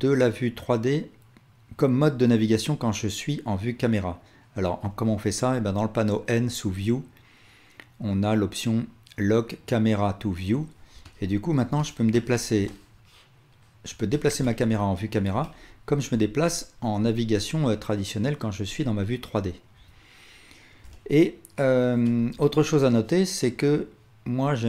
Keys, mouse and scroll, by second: 4.9 n, 10.1 click, 11.1-22.1 alt+drag, 19.7 n, 22.4-24.6 alt+drag.